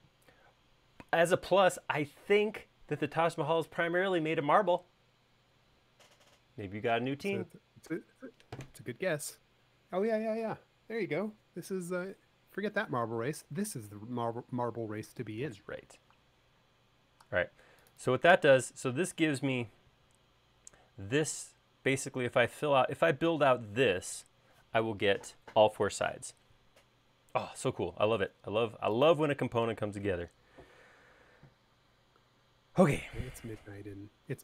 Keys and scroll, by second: 20.2 q, 28.0 q.